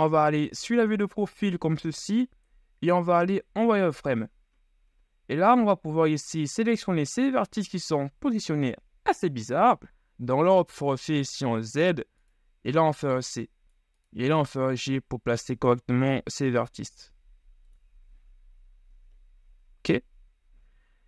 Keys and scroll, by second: 3.6 z, 6.6 z, 10.5 z, 12.7 c, 14.6 g, 18.1 z.